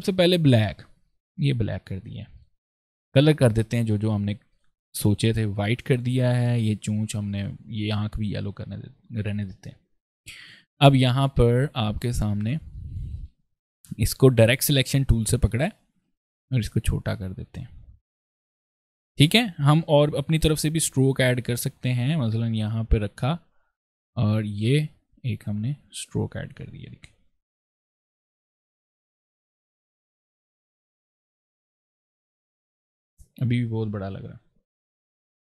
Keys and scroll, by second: 10.2 ctrl+space, 11.4 ctrl+space, 13.0 ctrl+a, 18.2 ctrl+space, 19.8 p, 31.1 v, 31.7 space, 34.6 ctrl+z, 35.1 ctrl+i.